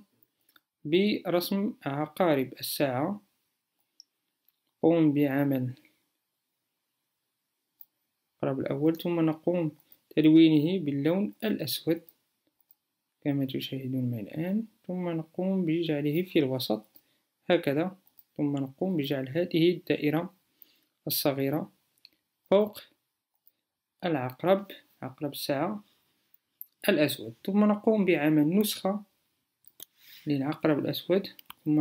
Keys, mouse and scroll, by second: 25.9-30.9 alt+drag.